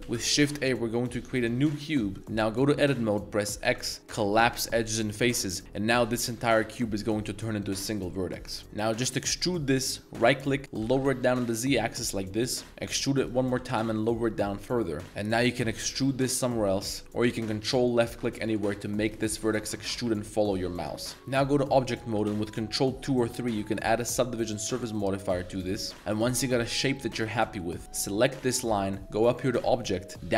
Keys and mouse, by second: 0.0 shift+Tab, 0.2 shift+a, 2.2 z, 3.7 x, 5.6 z, 6.0-7.0 middle drag, 7.0 g, 8.1-9.2 middle drag, 9.2 e, 10.8 g, 11.0 z, 12.2 z, 12.6 middle click, 12.8 e, 13.2 click, 13.5 g, 13.7 z, 15.6 e, 17.0 ctrl+z, 17.8 ctrl+click, 18.5-19.4 ctrl+drag, 20.2 ctrl+click, 21.1 Tab, 21.8 middle click, 22.5 ctrl+2, 23.1 ctrl+3, 23.6 Tab, 24.0 right click, 24.3 right click, 24.7 g, 24.8-25.5 right drag, 25.5 click, 25.5 g, 25.7 Tab, 25.9 middle click, 26.4 Tab, 26.4-27.2 middle drag, 27.3 ctrl+s, 27.6 middle click, 27.8 z, 28.3 g, 28.6 right click, 29.5-30.3 drag.